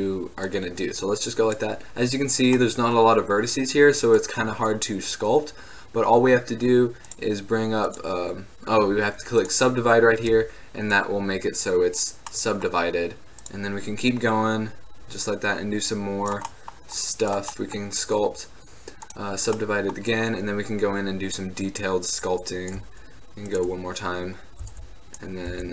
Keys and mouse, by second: 0.6-2.4 drag, 2.7-6.0 drag, 6.0 middle click, 7.1-16.2 drag, 16.8-20.3 drag, 20.3 middle drag, 20.4-20.9 drag, 20.9 middle click, 20.9 click, 22.6-23.2 middle drag, 23.6 middle click, 24.7 f, 25.5-25.7 middle drag, 25.6 f.